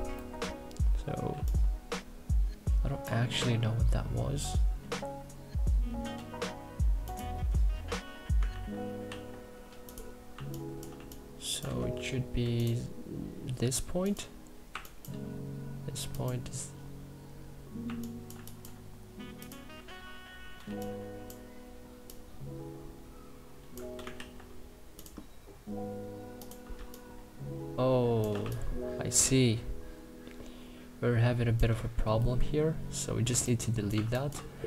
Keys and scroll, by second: 0.0 Delete, 1.0 3, 8.2 ctrl+z, 9.9 2, 10.6 3, 14.3 1, 17.5 1, 18.0 3, 23.8 ctrl+z, 26.4 3, 32.0 Delete, 32.9 3, 33.6 1.